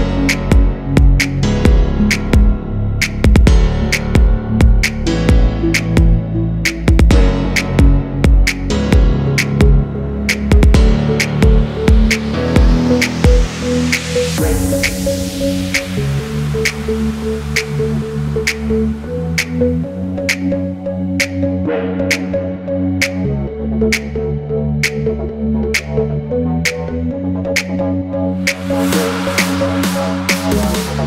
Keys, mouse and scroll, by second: 0.9 alt+scroll down 1, 6.0 double click, 7.9-9.3 scroll up 1, 12.6 double click, 14.5 alt+scroll up 1, 15.3 double click, 15.7 Delete, 17.2 Delete, 20.0 double click, 20.3 alt+scroll down 1, 20.7-21.1 alt+scroll up 1, 21.3 alt+scroll up 1, 21.6 space, 22.7 double click, 24.7-25.4 typing, 24.9-25.4 scroll up 1, 26.5-27.1 typing, 28.5 typing, 30.2 typing.